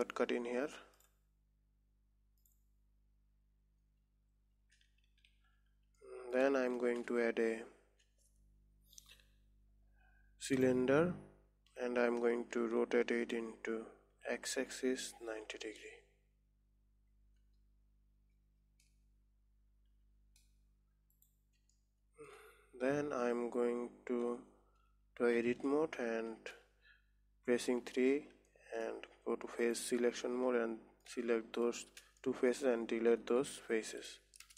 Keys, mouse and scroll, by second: 1.3-2.9 drag, 5.6 n, 6.5 middle click, 7.3 shift+a, 13.1 r, 22.2-25.2 middle drag, 25.7 Tab, 26.1-28.3 middle drag, 28.3 3, 29.0 middle click, 29.5-30.1 scroll up 1, 30.1 click, 30.8-32.1 middle drag, 32.1 shift+click, 32.8 middle click, 33.6 Delete.